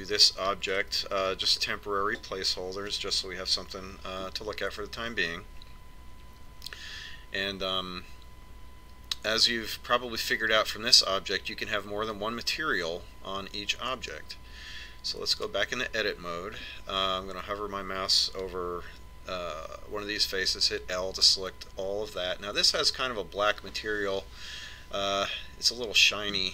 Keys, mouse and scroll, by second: 15.7 Tab, 20.9 l.